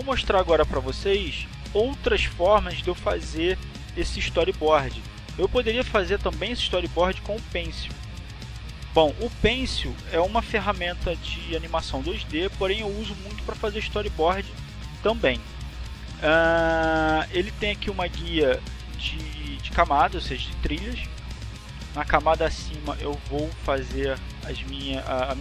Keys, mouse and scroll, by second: 0.6-2.3 drag, 7.7 click, 23.8 click.